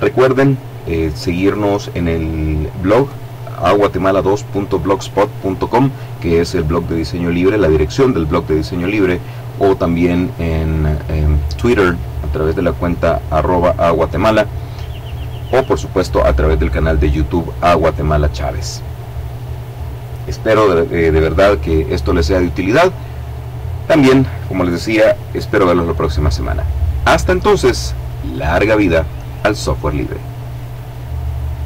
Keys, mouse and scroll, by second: 30.4 click, 31.4 click.